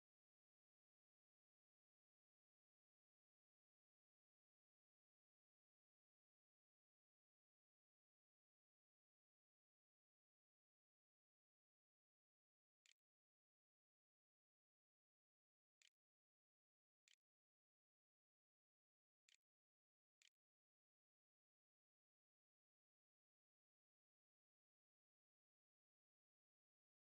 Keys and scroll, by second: 11.1-13.3 typing, 14.7-18.8 typing, 15.3 Delete, 19.8 ctrl+s, 20.5 a.